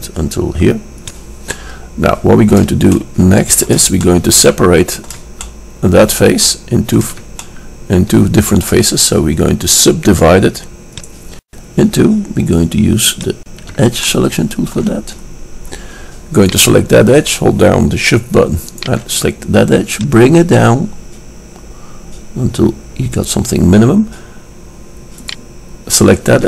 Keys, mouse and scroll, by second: 9.9-11.4 middle drag, 11.4-15.2 drag, 14.3-18.2 middle drag, 16.5-18.2 right drag, 18.8-21.9 drag, 20.0 right click, 20.6 middle click, 25.4-26.4 drag.